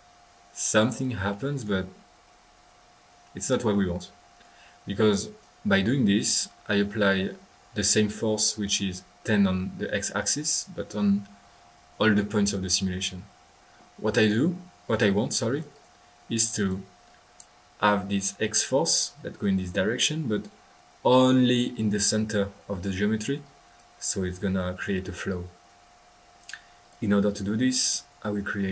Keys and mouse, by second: 0.8 click, 1.5 click, 5.2-5.6 drag, 5.8 click, 8.6-9.7 middle drag, 10.8-11.4 drag, 11.2 middle click, 11.4-12.0 middle drag, 14.4-14.8 middle drag, 14.8 click, 15.5-15.9 drag, 16.4-16.8 drag, 17.0 click, 17.1 click, 20.3 middle click, 23.4 click, 26.8 click, 27.6 middle click, 27.9 click.